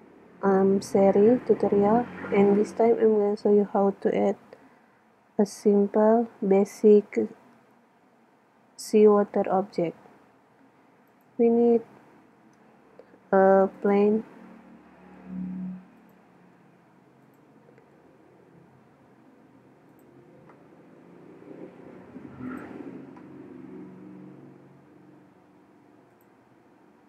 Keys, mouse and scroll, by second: 12.4 shift+a, 15.2 s, 16.1-19.3 drag, 16.4 s, 18.0 s, 20.0-20.9 drag, 20.9 s, 21.2 click, 21.7 drag, 22.6-24.4 drag, 23.5 z, 25.2 s, 26.3-27.0 drag.